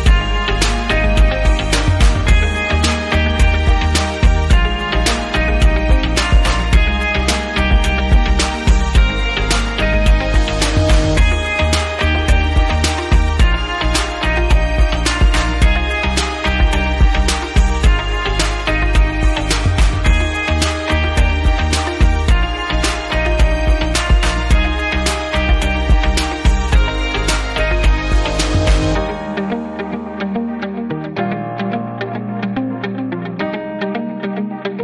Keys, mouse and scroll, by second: 1.0 shift+click, 4.2 click, 5.3 click, 5.4 click, 6.1 click, 6.2 click, 9.9 click, 12.1 click, 12.6 Caps_Lock, 13.1-14.4 typing, 17.1-18.5 typing, 19.8 click, 21.8 click, 22.0 click, 22.1 double click, 22.2 click, 22.4 click, 22.5 double click, 23.0 double click, 24.8 click, 25.2-26.1 typing, 27.8 click, 30.2 click, 30.5 click, 30.6 double click, 31.6 double click, 34.1 click.